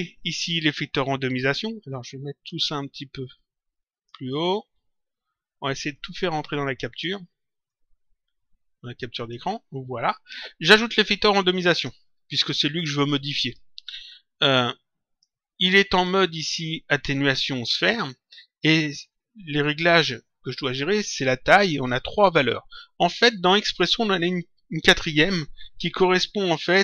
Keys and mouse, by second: 1.8 click, 3.3 click, 5.9 click, 7.6 click, 11.1 click, 13.0 click, 14.4 click, 15.8 click.